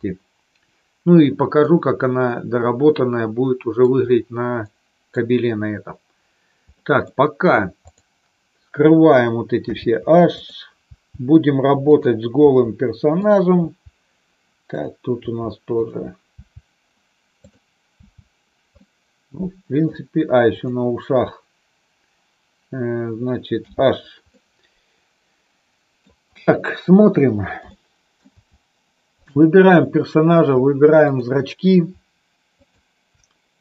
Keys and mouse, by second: 1.7-3.8 middle drag, 4.7 middle click, 6.8 middle click, 7.8 click, 9.5 h, 10.3 click, 10.9 h, 12.4 h, 13.5 h, 14.7 click, 15.3 h, 15.8 click, 16.4 h, 17.3 click, 17.9 h, 18.8-19.9 middle drag, 20.5 click, 23.5 h, 24.3-25.9 middle drag, 27.7 shift+middle click, 29.2 click, 31.0 shift+click, 32.5 shift+click.